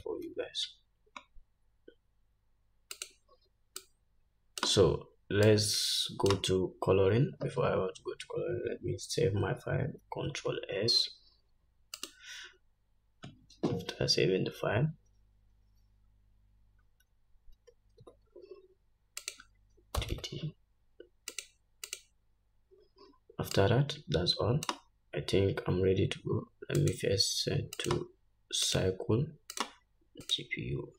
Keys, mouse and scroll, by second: 0.3 g, 3.5-4.2 drag, 5.9 click, 10.8 ctrl+s, 18.6 ctrl+s, 24.0 click, 27.3-28.2 drag, 30.0 click.